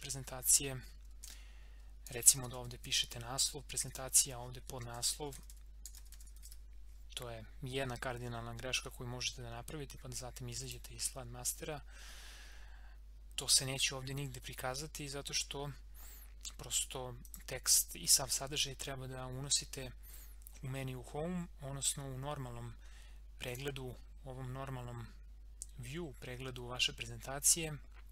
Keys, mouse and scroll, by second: 1.2 ctrl+a, 1.8-3.3 typing, 3.8 click, 4.9 ctrl+a, 5.0-7.0 typing, 10.6 click, 11.6-13.0 scroll up 1, 13.0 scroll down 1, 15.6 scroll up 1, 17.3 click, 23.5 click.